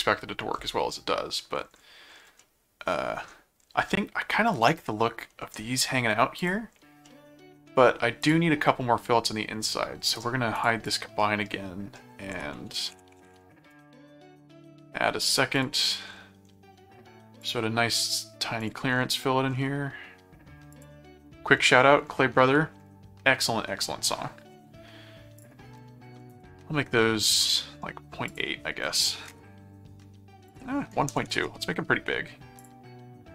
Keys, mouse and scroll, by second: 0.9 middle click, 2.4 middle click, 3.9 middle click, 5.3 middle click, 6.4 click, 7.0 middle click, 8.2 click, 10.1 right click, 10.5 click, 11.2 middle click, 12.3-13.7 typing, 15.5 click, 17.4 click, 18.6 click, 20.7 click, 25.3 click, 27.5 middle click, 28.2 click, 30.5 click, 32.6 click.